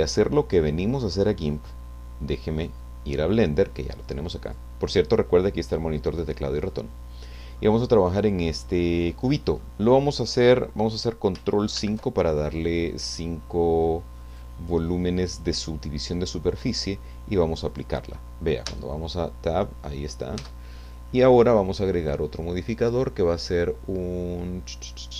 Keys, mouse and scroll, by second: 2.5 click, 4.4 click, 6.8 middle click, 7.9-8.5 scroll up 1, 8.5-9.5 middle drag, 9.6-11.3 scroll up 1, 11.7 ctrl+5, 14.3-17.0 drag, 17.7 click, 18.7 Tab, 19.6-20.0 scroll up 2, 20.0 scroll down 2, 20.4 Tab, 22.0 click.